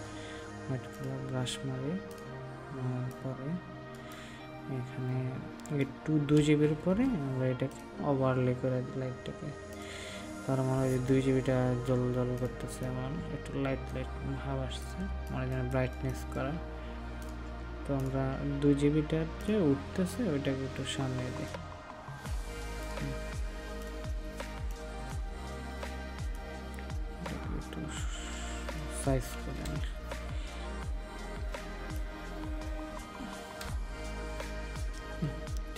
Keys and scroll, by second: 15.1 ctrl+space, 24.0 ctrl+space.